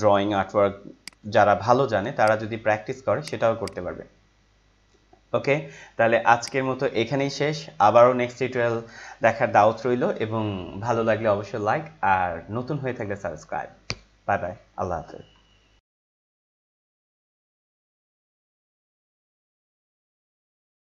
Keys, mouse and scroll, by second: 1.0 click, 6.4 click, 7.4 scroll up 1.